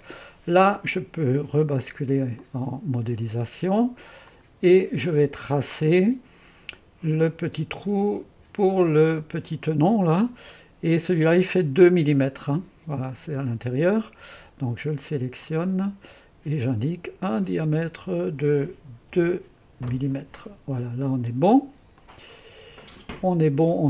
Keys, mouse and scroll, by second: 2.4 click, 4.3-8.4 drag, 9.4 click, 10.1 middle click, 10.1-10.6 scroll up 2, 10.6-13.4 drag, 15.5-18.3 drag, 18.9-19.6 typing, 19.9 Return, 22.0-23.0 drag, 23.0 middle click.